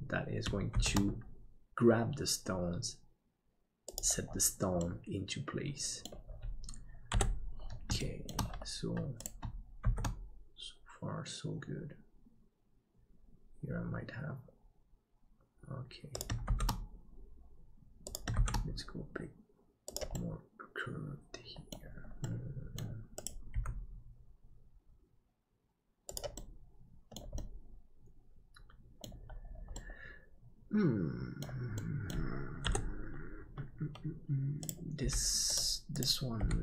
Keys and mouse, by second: 0.7 shift+d, 4.9-6.1 middle drag, 7.1 KP_7, 8.1 shift+middle click, 9.8 shift+d, 16.4 shift+d, 18.6 shift+d, 20.2-21.7 middle drag, 22.2 middle click, 23.5 g, 26.4 middle click, 27.3-29.1 middle drag, 29.7-31.4 middle drag, 31.8 middle click, 32.6 KP_7, 35.0 g, 36.4 g.